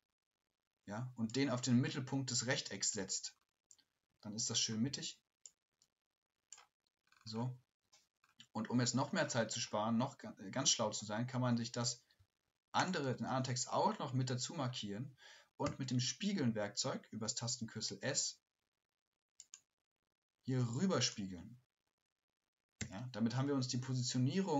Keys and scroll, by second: 12.2 typing.